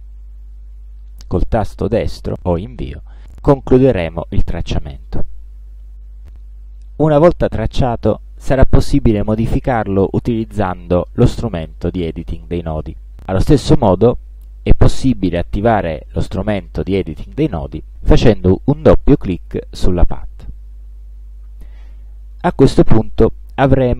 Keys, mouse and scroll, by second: 7.6-9.1 drag, 13.9 space, 16.7 click.